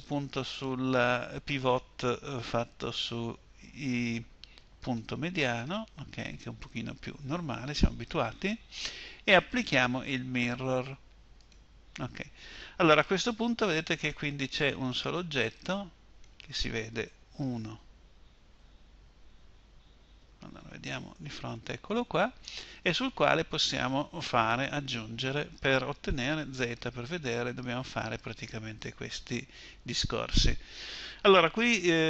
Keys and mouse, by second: 13.5 Tab, 16.9 1, 18.0 Escape, 20.3 KP_1, 25.9 z.